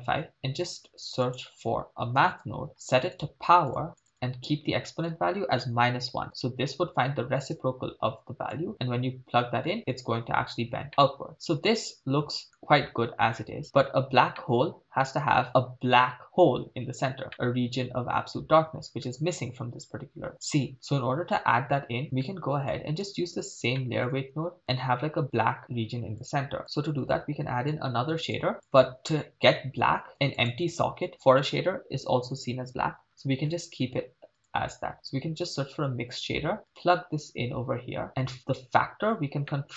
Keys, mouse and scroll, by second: 0.9 shift+a, 4.0 click, 4.9-6.3 drag, 7.5-8.7 drag, 10.9-12.6 middle drag, 13.0-13.6 scroll up 4, 13.9-14.3 scroll down 3, 14.4 middle click, 17.3-19.0 middle drag, 21.9-22.2 scroll down 3, 22.0 middle click, 22.7 click, 23.3-23.7 scroll down 2, 23.8 middle click, 24.6 click, 26.2-26.6 drag, 26.6 middle click, 27.8 click, 28.6 click, 30.1 shift+a, 39.5-39.7 middle drag.